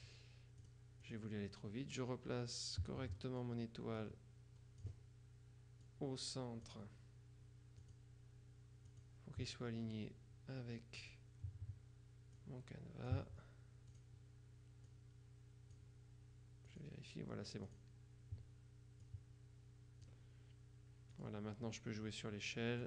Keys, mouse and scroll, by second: 0.7 click, 4.1-5.4 drag, 5.9-7.2 drag, 7.9 click, 9.0 click, 11.1 click, 12.4 click, 14.0 click, 15.0 click, 16.8 click, 17.8 click, 19.1-20.6 drag, 21.2 click.